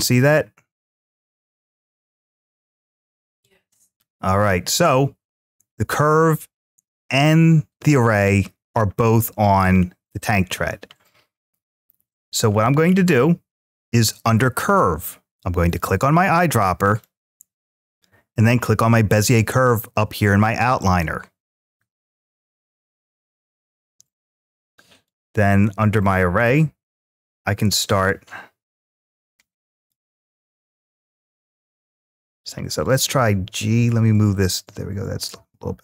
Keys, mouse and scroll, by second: 9.5-12.3 scroll down 1, 12.3-14.2 scroll down 1, 14.2-15.8 scroll down 1, 16.6 click, 24.9-26.3 drag, 27.1-29.7 drag, 30.9 click, 31.9 ctrl+z, 33.1 g.